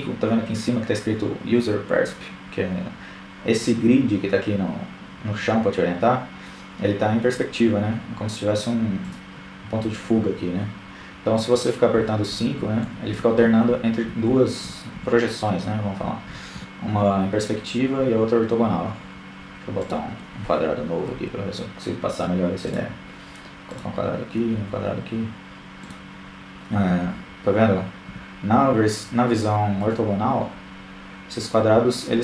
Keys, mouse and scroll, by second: 5.4-7.0 drag, 8.4-11.5 typing, 12.7 KP_5, 12.9 KP_5, 13.1 KP_5, 14.5 KP_5, 15.4 KP_5, 16.3-17.7 drag, 17.7 shift+a, 20.4-21.6 drag, 21.3 shift+a, 23.6 KP_5, 24.7 KP_5, 25.2 KP_5, 26.5-27.9 middle drag.